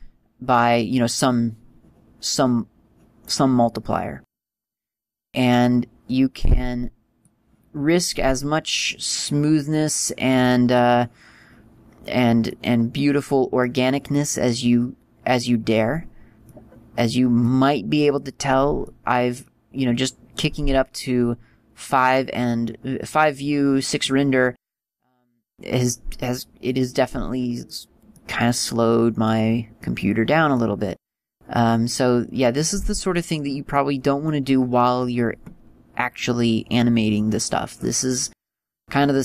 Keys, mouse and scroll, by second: 6.3 click, 9.1 click, 12.7 middle click, 17.7 middle click, 19.1 middle click, 24.9 middle click, 27.2 middle click, 28.5 middle click, 34.0 middle click.